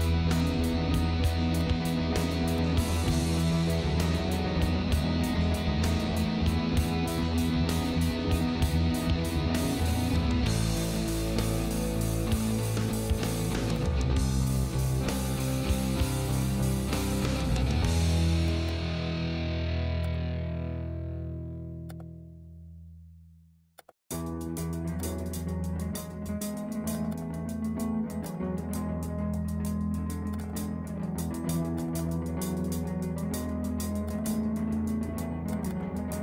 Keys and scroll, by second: 35.2 ctrl+z.